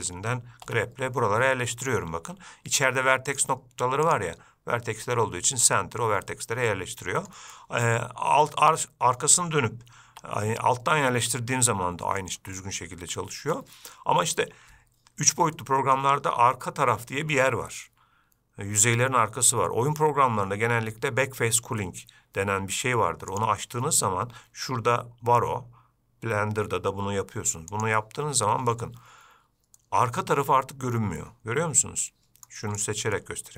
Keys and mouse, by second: 0.9 g, 4.3-6.5 drag, 7.0 middle click, 7.8-9.4 middle drag, 10.3 g, 12.8-13.8 middle drag, 15.8-16.2 shift+middle drag, 23.7-28.3 drag, 30.0-32.7 middle drag, 33.4-33.5 middle drag.